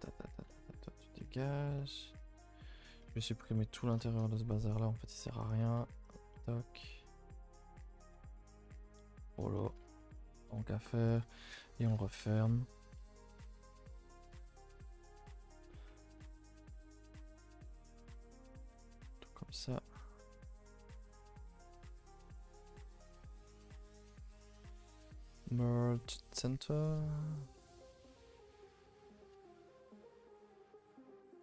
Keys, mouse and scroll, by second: 0.8 x, 1.1 middle click, 1.3-1.7 scroll up 2, 1.7-3.1 middle drag, 3.1-3.5 scroll down 8, 3.5 middle click, 4.1-5.4 scroll up 3, 4.4 middle click, 5.4 alt+click, 6.1 x, 6.3-7.5 middle drag, 7.5 l, 7.8-8.4 scroll down 2, 8.4 x, 8.6 middle click, 9.2 scroll up 2, 9.5 middle click, 9.6 a, 9.8 a, 9.9 middle click, 10.1 2, 11.1 alt+click, 11.5 f, 11.8 a, 12.0 a, 12.1 1, 12.9 middle click, 13.7 k, 14.9 a, 15.3 ctrl+z, 15.4 ctrl+z, 15.7 ctrl+z, 16.0 ctrl+z, 16.4 ctrl+z, 16.8 a, 16.9 a, 17.4 click, 18.6 shift+click, 18.8 f, 19.5 click, 20.0 shift+click, 20.5 g, 21.6 f, 21.9 a, 22.0 a, 22.4 ctrl+r, 23.3 1, 23.6 click, 23.9 shift+click, 26.8-27.4 right drag, 27.4 click, 28.2 z, 29.1 shift+click, 29.9 middle click, 30.3-30.7 scroll up 2, 30.7 click, 31.0 shift+click.